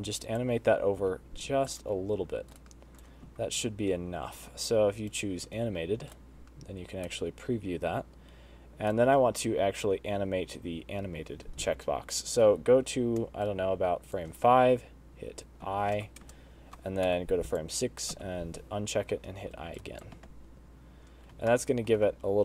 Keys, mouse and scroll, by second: 0.0 g, 1.3 i, 2.8 shift+right click, 3.5 space, 4.7 space, 5.4 click, 6.4 shift+right click, 13.7 shift+right click, 15.9 i, 16.5 KP_0, 17.3 Right, 17.8 click, 18.4 i, 20.0 shift+right click, 20.5 space, 21.6 space, 21.8 middle click.